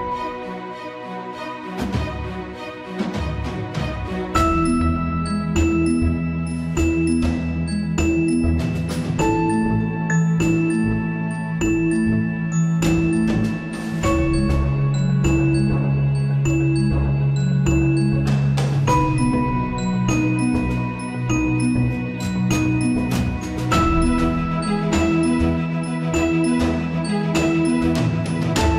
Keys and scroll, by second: 0.6 Return, 23.2 Return, 24.7 Return, 27.7 alt+Tab.